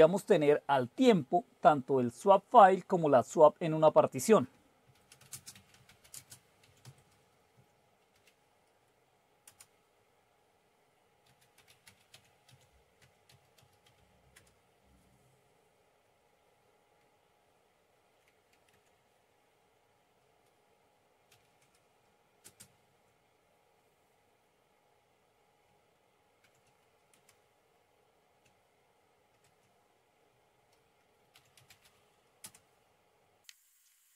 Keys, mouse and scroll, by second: 0.0-2.4 typing, 4.6-8.1 typing, 9.5 typing, 11.5-14.4 typing, 17.0-18.3 Down, 18.7 Up, 21.3 #, 22.5 space, 26.5 ctrl+o, 27.3 Return, 29.6 ctrl+x, 31.1-32.5 typing.